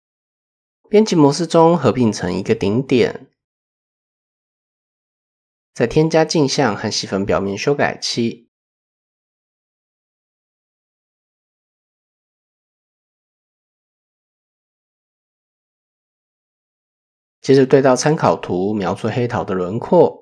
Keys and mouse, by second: 0.2 Tab, 2.2 m, 4.3-5.5 typing, 6.7-8.2 drag, 8.4 click, 13.3 click, 14.9 click, 15.6 shift+middle click, 16.5-18.2 drag, 18.7 shift+middle click.